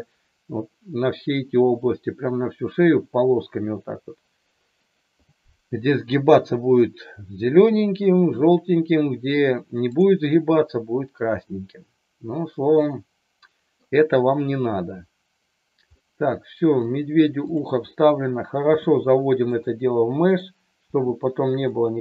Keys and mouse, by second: 9.9 click, 12.7 middle click, 16.0 middle click, 17.4 click, 18.6 g, 19.5 click, 20.1 click, 20.8 g, 21.8 click.